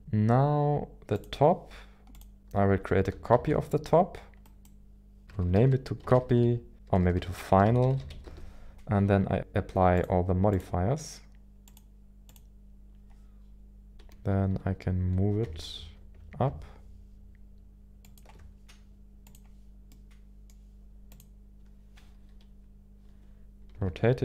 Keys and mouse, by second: 1.1 click, 3.8 shift+d, 5.2-8.9 drag, 5.3 BackSpace, 5.4 BackSpace, 7.0 BackSpace, 7.2 BackSpace, 9.9-10.9 drag, 11.6-12.6 drag, 14.0 KP_1, 14.5 KP_7, 15.4 g, 15.8 y, 18.0 ctrl+click, 19.2 click, 19.9 middle click, 22.2 KP_1, 23.7 r, 24.1 y.